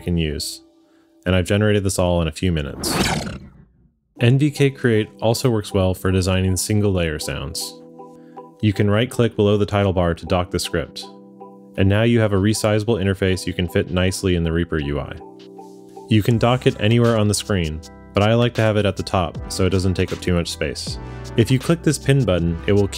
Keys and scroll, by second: 2.1 space, 6.3 q.